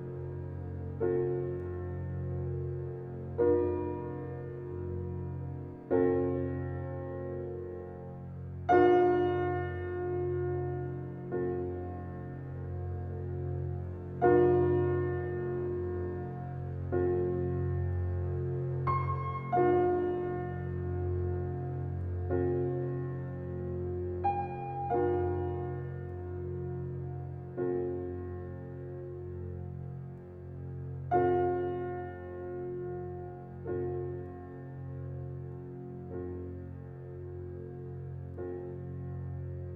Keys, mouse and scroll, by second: 0.2-0.9 scroll down 1, 1.5-1.9 scroll up 1, 2.9 click, 3.3-5.2 scroll down 1, 5.2-5.6 scroll down 1, 11.6 click, 14.7 click, 15.5 right click, 16.7 click, 20.9 ctrl+click, 24.8 scroll down 1, 25.2 scroll up 1, 27.7-28.6 typing, 29.3 Return, 33.1 3, 33.8 shift+'.